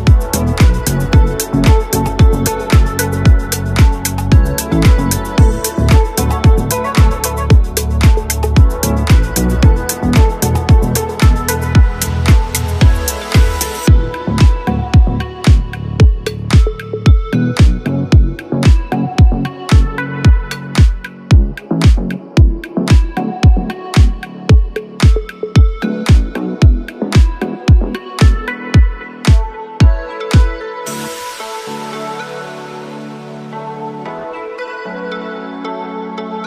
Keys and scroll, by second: 1.0 Escape, 12.2 r, 18.6 Escape, 21.1 g, 21.5 y, 25.1 Escape, 26.1 r, 27.1 Escape.